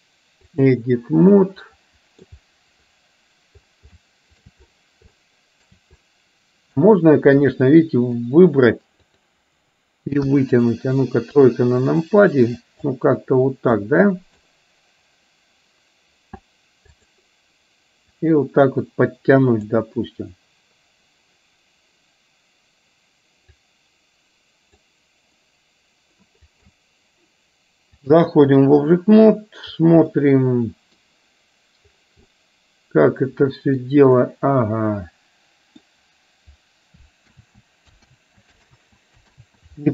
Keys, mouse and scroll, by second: 1.4-2.4 middle drag, 3.9 shift+middle click, 5.3 shift+middle click, 6.1 middle click, 7.6 middle click, 10.3 KP_1, 11.4 KP_3, 12.9-14.5 drag, 18.3-19.6 drag, 23.8-24.8 drag, 26.6 ctrl+click, 28.1 click, 30.1 middle click, 32.4-33.9 middle drag, 34.3-36.0 middle drag, 37.4 ctrl+z, 38.5 ctrl+z, 39.0 ctrl+z, 39.4 ctrl+z.